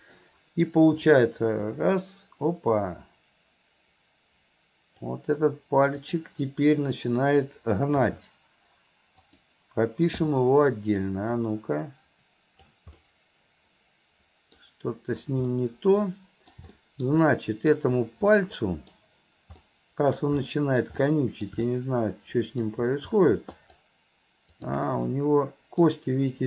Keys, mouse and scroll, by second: 1.1-5.2 drag, 6.0 click, 11.5-12.8 drag, 13.0-17.1 middle drag, 17.3-17.8 middle drag, 18.4-20.3 middle drag, 20.5-20.9 middle drag, 21.1-21.5 middle drag, 21.7-22.7 middle drag, 23.6 click, 24.6 click, 25.1-25.9 middle drag.